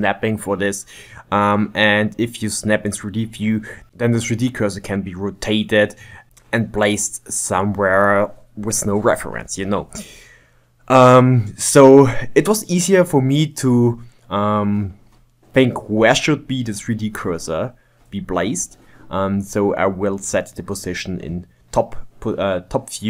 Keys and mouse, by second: 0.5 click, 0.9 ctrl+z, 1.1 ctrl+z, 1.4 middle click, 2.2 shift+right click, 2.6 n, 2.9 click, 3.4-5.0 drag, 5.1 click, 5.7 click, 6.7 click, 7.3-8.4 drag, 8.4 shift+right click, 9.2 click, 9.9 shift+middle click, 10.1 click, 10.9 shift+middle click, 11.1 click, 11.7 shift+middle click, 11.9-12.9 drag, 12.9 middle click, 13.1-14.3 drag, 15.1 click, 15.3 middle click, 15.8 Tab, 16.3 click, 17.1 shift+d, 18.0 click, 18.2 x, 18.4 ctrl+Tab, 18.6 ctrl+Tab, 19.0 shift+right click, 19.2 click, 19.7 shift+right click, 20.1 click, 20.5 shift+middle click, 20.5 shift+right click, 20.7 click, 21.1 shift+right click, 21.7 click, 22.1 ctrl+shift+middle click, 22.6-23.0 drag.